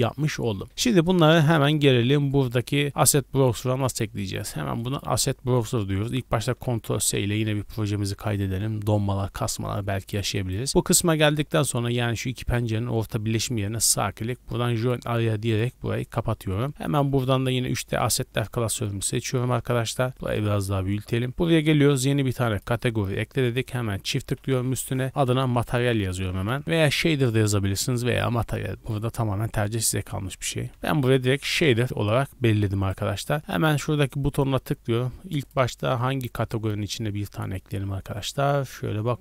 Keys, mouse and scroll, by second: 1.9 click, 3.0-5.1 drag, 6.9 ctrl+s, 10.3-11.1 right drag, 13.6-14.9 right drag, 14.9 click, 16.8-18.6 drag, 19.9 click, 22.5 click, 23.4 click, 23.7-31.4 drag, 25.1 BackSpace, 32.8-33.3 right drag, 33.3 click, 34.3 click, 35.4 click, 35.8-37.7 drag.